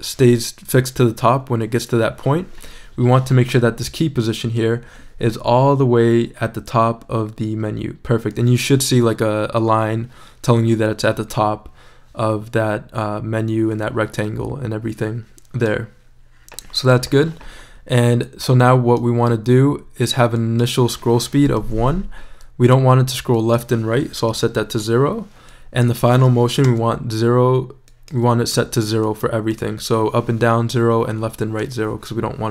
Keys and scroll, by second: 21.6 i, 24.3 0, 24.7 Return, 26.6 0.